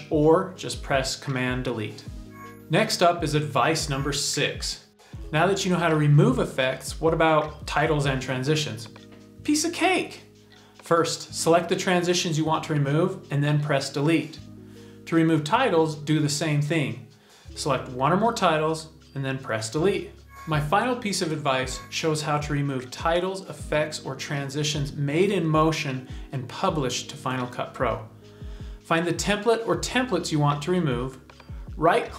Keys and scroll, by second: 9.6 super+t, 14.2 BackSpace, 18.0 BackSpace.